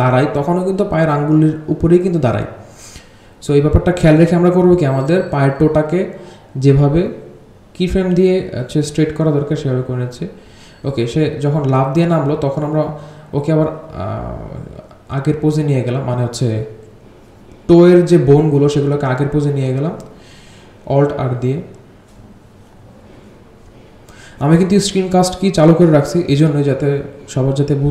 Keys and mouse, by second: 6.0-10.8 alt+drag, 12.4-21.2 drag, 22.4-25.0 drag, 27.4-27.7 drag.